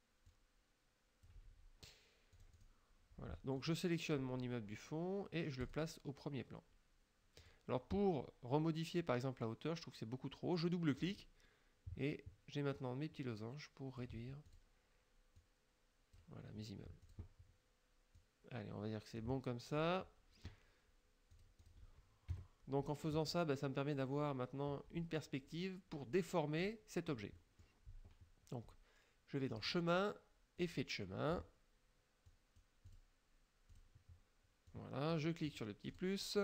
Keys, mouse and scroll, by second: 0.3 click, 2.4-2.8 drag, 3.6 click, 5.7 click, 7.4 click, 11.0 click, 12.8-14.2 drag, 14.5 click, 15.4 click, 17.0 click, 18.2-19.4 drag, 19.8 click, 21.4-21.9 drag, 22.3 KP_Subtract, 23.1 click, 26.6 click, 27.4 middle click, 29.6 click, 30.7 click, 32.3 click, 32.9 click, 33.8 click, 34.8 click, 36.0 click.